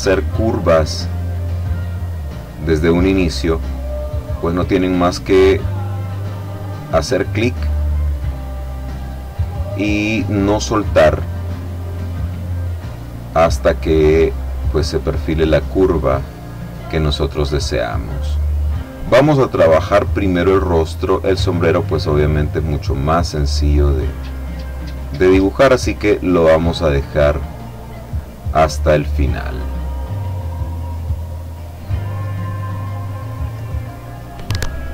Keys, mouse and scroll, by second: 1.7 click, 5.5-7.0 drag, 8.5-9.6 drag, 10.0 click, 10.4-11.9 middle drag, 12.6-14.2 drag, 14.8-16.0 middle drag, 18.4-20.4 drag, 20.6-21.8 middle drag, 23.1 click, 24.8-26.0 drag, 26.5-27.9 drag, 28.7 click, 30.5-31.6 drag, 32.3-33.9 drag.